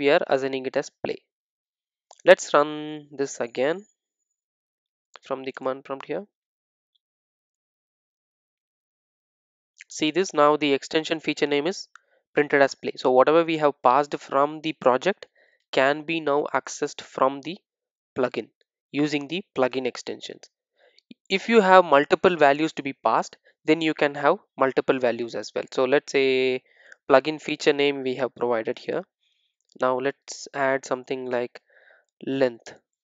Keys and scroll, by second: 26.4 super+d.